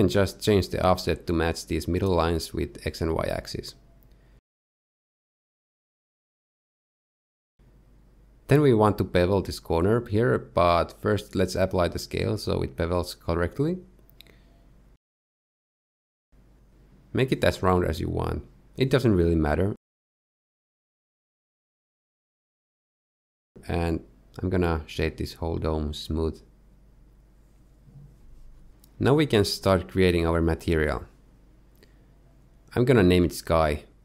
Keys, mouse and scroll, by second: 0.0 click, 0.4 click, 1.6 click, 3.9 click, 8.8 middle click, 9.9 alt+click, 10.1 middle click, 10.9 middle click, 11.6 Tab, 12.1 ctrl+a, 14.3 Tab, 16.0 ctrl+b, 24.7 Tab, 25.0 middle click, 25.5 middle click, 26.0 right click, 30.5 click, 31.6 click, 32.2 click.